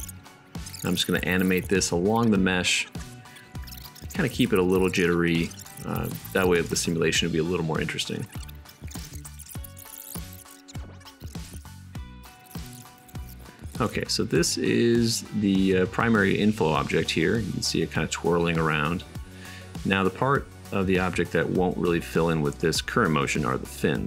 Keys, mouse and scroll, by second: 8.4-8.9 shift+right drag, 8.9 shift+a, 9.2 shift+click, 9.2 shift+middle click, 9.2 shift+right click, 9.8 right click, 10.0 click, 10.0 middle click, 10.0 BackSpace, 10.6 middle click, 11.0 click, 11.5 click, 12.4 shift+click, 13.2-21.0 middle drag.